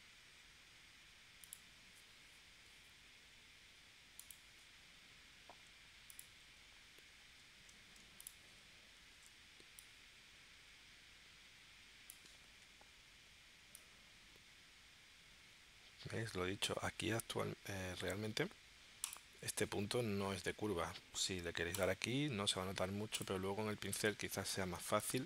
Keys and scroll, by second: 9.1 shift+c, 18.0 a, 23.9 space.